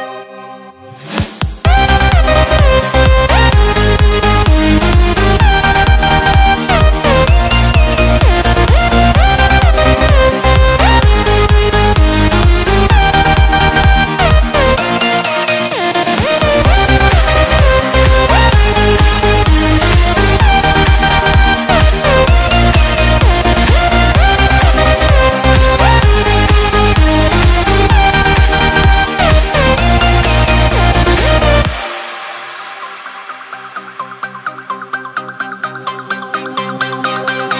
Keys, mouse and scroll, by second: 0.0 3, 0.2 d, 1.5 click, 4.2 ctrl+t, 6.6 click, 7.8 Down, 9.2 Left, 11.3 Return, 14.6 click, 16.4-19.5 typing, 24.0 click, 32.2 click.